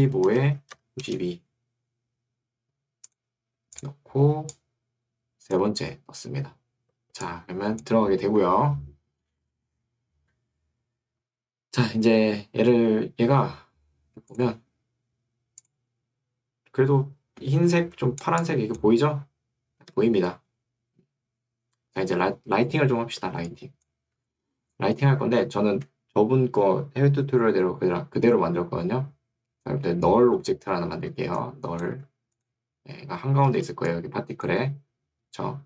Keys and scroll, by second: 0.0-0.7 typing, 0.3 Tab, 1.1 Return, 8.3 Escape, 17.7 2, 24.3 Escape, 31.9 Escape.